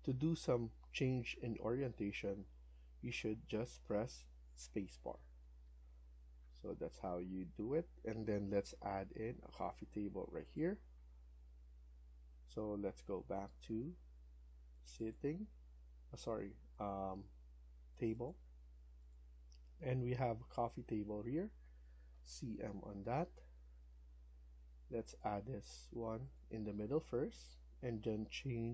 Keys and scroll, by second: 5.0 Escape, 5.3 Escape, 5.5 Escape, 22.0-22.5 typing, 25.3 Escape, 25.5 Escape, 25.7 Escape.